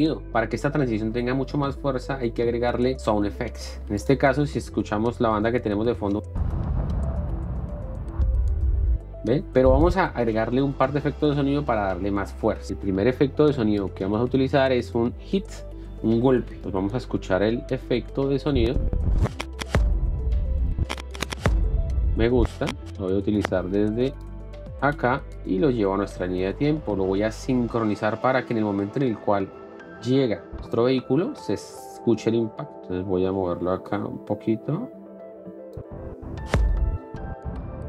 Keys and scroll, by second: 6.2 ctrl+x, 6.3 space, 12.7 ctrl+x, 20.0 space, 25.2 i, 33.6 ,, 36.7 space.